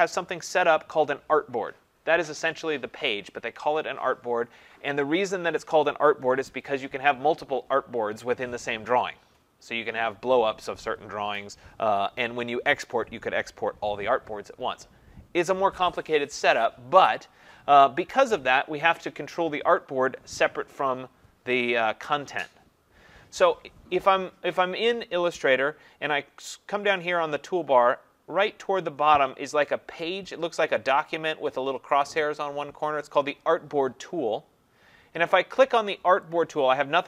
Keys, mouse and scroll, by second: 36.4-37.0 drag.